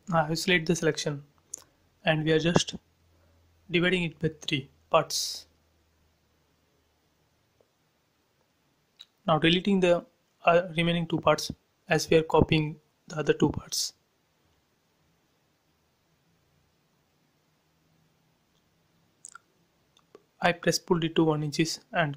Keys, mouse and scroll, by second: 0.3 shift+x, 1.4 click, 3.3 m, 3.9 ctrl+click, 5.5 click, 6.3-7.4 typing, 6.8 Return, 8.0 scroll down 1, 8.4-10.3 drag, 10.3 Delete, 11.4 f, 11.8 click, 12.6 1, 13.2 shift+', 13.3 Return, 13.7 space, 14.0 click, 14.4 x, 15.7 p, 16.1 click, 17.0 1, 17.6 shift+', 17.7 Return, 18.0 space, 18.2 click, 19.0 shift+e, 20.2 click, 21.5 right click.